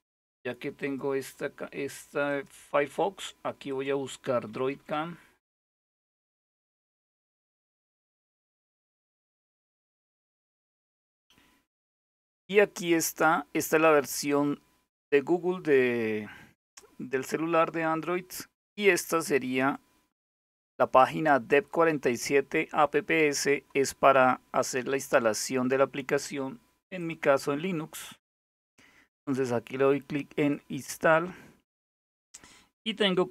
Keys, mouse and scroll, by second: 0.4 click, 1.9 click, 2.4 click, 3.3 click, 3.7-7.2 typing, 19.1 click, 24.5-25.6 scroll down 1, 26.6 click, 30.0 click, 33.1 ctrl++.